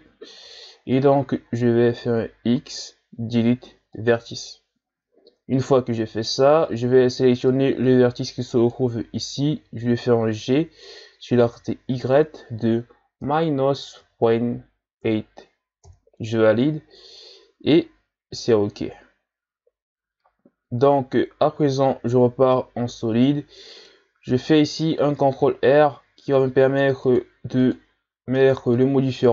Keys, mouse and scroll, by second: 0.4 KP_3, 1.6-2.2 shift+scroll down 2, 2.2-2.6 scroll up 1, 2.6 x, 5.2-5.5 shift+scroll down 2, 6.7 right click, 7.0 b, 10.6 g, 21.6 z, 22.6-25.2 middle drag, 25.2 ctrl+r, 28.3-29.3 middle drag.